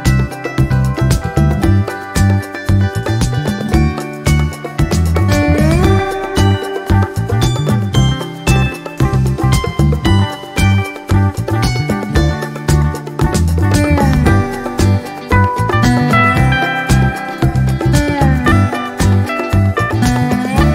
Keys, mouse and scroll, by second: 0.6-0.9 ctrl+scroll up 2, 1.0 ctrl+click, 1.5-3.2 ctrl+drag, 3.3 ctrl+scroll down 2, 3.9 ctrl+scroll up 2, 4.3-6.7 ctrl+drag, 6.8 ctrl+scroll down 2, 7.2 ctrl+middle click, 8.2-9.8 ctrl+drag, 10.2-12.0 drag, 12.5 click, 13.6-17.8 drag, 19.0 click, 19.7-20.7 drag.